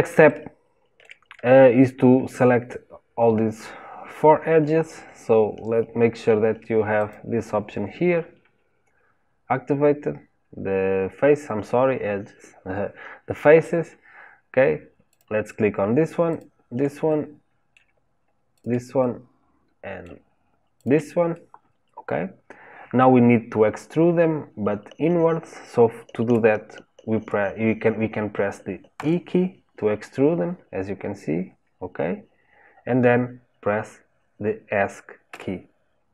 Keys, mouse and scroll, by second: 0.2-6.9 shift+middle drag, 6.9 click, 15.0 click, 16.2 shift+click, 17.0-18.5 middle drag, 18.5 shift+click, 18.9-20.7 middle drag, 20.7 shift+click, 21.2-24.3 middle drag.